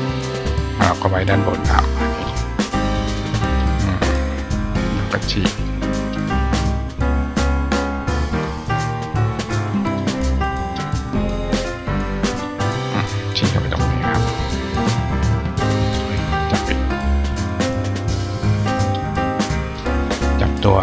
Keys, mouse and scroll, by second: 1.9 right click, 3.3 click, 4.3-5.9 drag, 7.2 click, 11.3 click, 14.6-15.8 drag, 17.9 click, 19.3 click, 19.9 click.